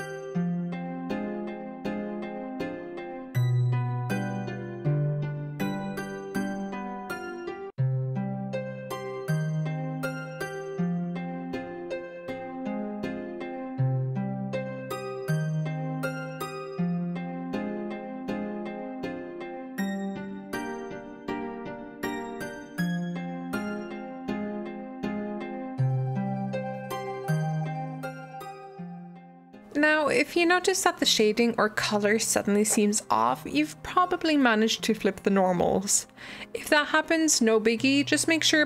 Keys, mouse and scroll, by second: 0.0 g, 1.3 click, 1.5 g, 2.1 Tab, 2.2-2.7 scroll down 4, 2.3 middle click, 2.5 alt+z, 2.7 middle click, 3.0 scroll up 3, 3.1-3.5 scroll down 1, 3.5 g, 4.0 shift+middle drag, 4.1 scroll up 1, 4.2-4.8 shift+middle drag, 4.8 s, 5.2 g, 5.4-6.1 middle drag, 6.1 g, 6.4-7.7 middle drag, 7.9 g, 8.0 click, 8.1 g, 8.5 drag, 8.5 middle drag, 8.8 Tab, 9.1 click, 9.4 click, 9.7 i, 10.1 e, 11.4 Tab, 11.5-12.2 middle drag, 12.3-12.7 right drag, 12.7 click, 12.9 click, 13.1 scroll down 1, 13.1 middle click, 13.2-13.5 scroll up 1, 13.5 click, 14.5 scroll down 2, 14.6 click, 14.7 scroll up 2, 14.8 scroll down 1, 14.9-16.2 middle drag, 16.2 scroll down 1, 16.4 middle click, 16.6 scroll up 1, 16.7 middle drag, 16.9 drag, 17.1 s, 18.0 shift+middle click, 18.2 click, 18.4 middle click, 18.7 click, 18.9 Tab, 19.8 click, 19.8 middle click, 20.8 click, 21.4 middle click, 21.5 g, 22.0 Tab, 22.1 shift+middle click, 22.6 Tab, 22.7 middle click, 22.9 click, 23.0 click, 23.2 g, 23.6 middle click, 23.7 Tab, 23.9 drag, 24.5 Delete, 24.8 click, 24.9 g, 25.4 middle click, 25.7 scroll up 1, 25.8-26.6 shift+middle drag, 26.6 g, 26.9 middle click, 27.0 scroll down 1, 27.1 middle drag, 27.4 alt+d, 28.8 click, 28.9-29.3 shift+middle drag, 29.3 scroll up 3, 29.6 click, 29.7-38.2 middle drag.